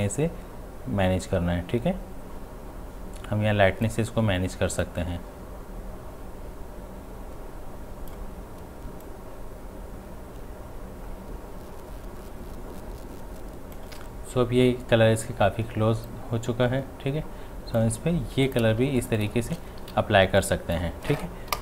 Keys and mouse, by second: 16.1-18.5 drag, 18.7 space, 19.0 ctrl+alt+click, 19.9 v, 20.4-21.6 drag.